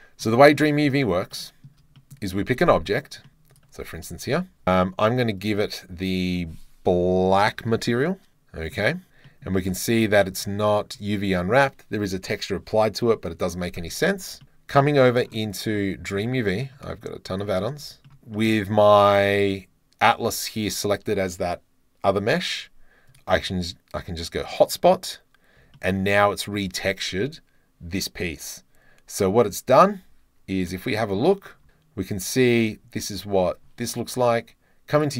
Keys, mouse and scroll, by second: 0.7 shift+middle click, 1.3 drag, 1.7 middle click, 2.0 shift+middle click, 2.3 shift+middle click, 2.7 middle click, 3.3 middle click, 4.3-5.3 middle drag, 4.4 KP_Decimal, 5.5 middle click, 7.3-8.3 middle drag, 8.3 click, 9.3 click, 10.0 middle click, 10.2 middle click, 17.3 click, 17.4-17.8 middle drag, 18.1 middle drag, 18.5 click, 23.1 click, 24.6 click, 25.8 shift+middle click, 29.9 Tab, 30.7 click.